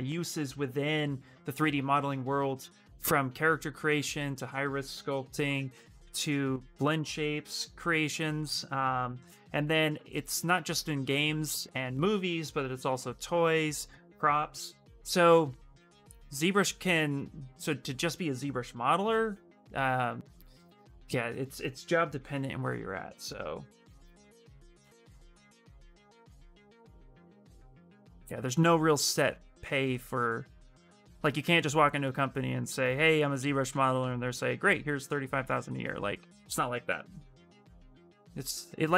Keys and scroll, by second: 33.4 ctrl+z.